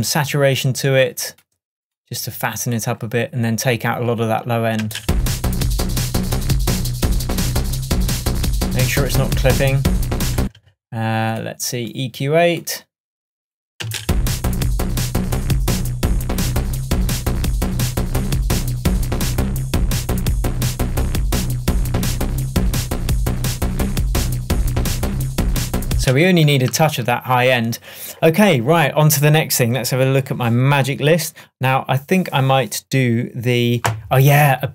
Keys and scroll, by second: 4.9 space, 10.4 space, 13.9 space, 26.0 space, 26.7 super+space, 26.9 super+s.